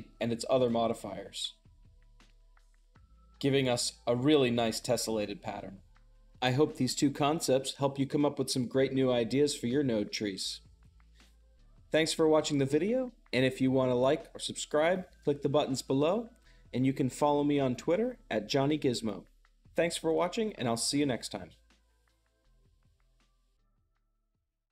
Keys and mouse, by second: 0.0-1.8 drag, 2.1-23.4 shift+middle drag.